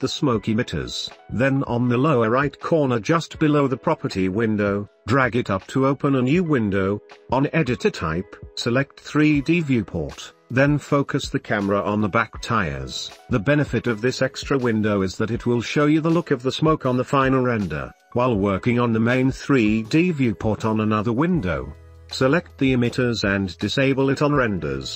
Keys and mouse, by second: 6.3 click, 8.0 click, 8.9 click, 10.1 middle drag, 10.4 shift+middle drag, 11.2 middle drag, 11.4 shift+middle drag, 12.0 shift+middle drag, 12.5 middle click, 12.8-13.1 shift+middle drag, 13.3 middle click, 14.1 click, 14.5 click, 15.6-16.4 drag, 16.4 middle click, 20.2 middle click, 22.5 middle click, 24.2 middle click, 24.8 shift+middle click.